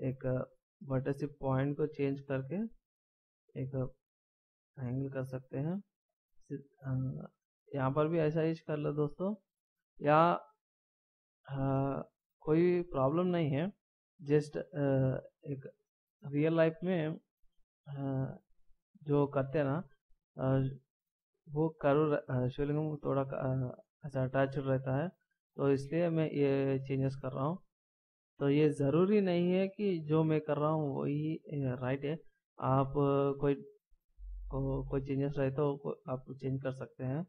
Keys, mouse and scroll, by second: 0.0 scroll down 1, 1.3 click, 5.5 middle click, 7.8 ctrl+scroll down 1, 12.9 right click, 13.8 click, 14.3 right click, 15.3 click, 19.7 middle click, 20.8 ctrl+scroll down 1, 22.2 right click, 23.5 click, 26.7 click, 30.0 scroll down 1, 31.0 middle click, 32.3 scroll down 1, 33.2 middle click, 36.9 right click.